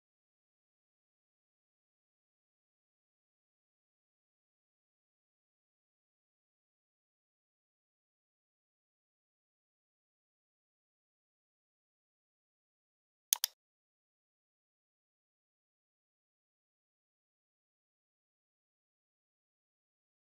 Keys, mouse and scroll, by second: 0.0-1.0 drag, 1.3-2.4 drag, 2.5 middle click, 4.6-5.7 drag, 6.6 click, 10.0 middle click, 10.2 scroll up 3, 10.3-11.0 scroll, 11.9 click, 13.5 click, 14.0 scroll, 17.8 middle click, 19.0 click.